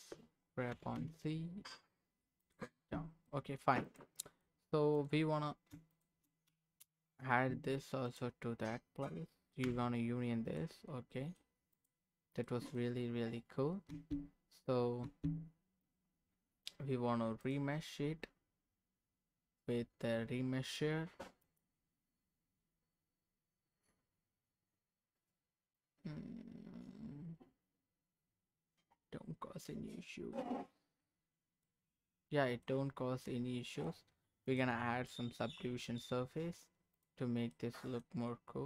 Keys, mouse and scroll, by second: 0.7 g, 1.6 z, 2.4 click, 2.6 Tab, 3.3 middle click, 3.8 click, 4.2 middle click, 4.9 click, 5.9 shift+click, 6.9 ctrl+KP_Add, 8.1 click, 9.6 h, 10.4 click, 11.1 middle click, 11.7 click, 12.4 middle click, 13.9 Tab, 15.0 Tab, 17.4 click, 21.4-30.0 drag, 30.3 middle click, 31.1-31.6 scroll down 2, 31.6-32.6 middle drag, 33.0 scroll up 1, 33.2 middle click, 37.0 click, 37.5 middle click.